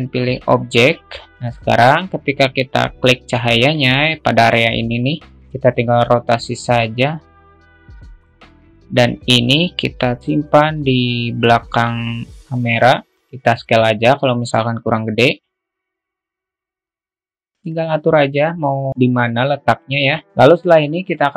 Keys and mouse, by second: 5.6 ctrl+z, 6.1-8.8 drag, 10.0-13.0 drag, 13.5 s, 15.6 click, 16.3 alt+middle click, 17.0 alt+middle click, 17.5-19.3 drag.